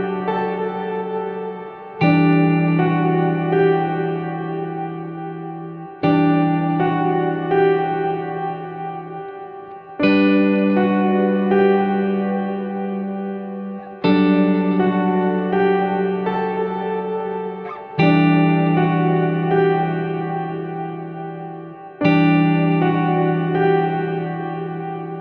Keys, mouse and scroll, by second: 0.5 click, 1.7 click, 3.5 click, 12.9-17.2 drag, 19.4-22.4 drag, 23.7 click, 24.4 click.